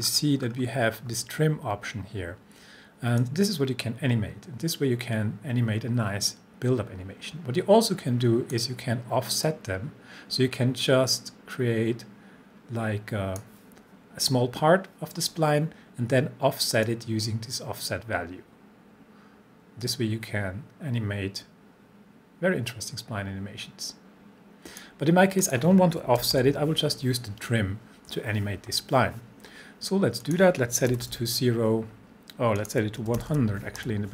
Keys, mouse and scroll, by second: 3.2-8.8 drag, 16.9-25.0 drag, 26.2 typing, 30.2 click, 30.9 typing, 32.6 click, 32.8-33.8 typing.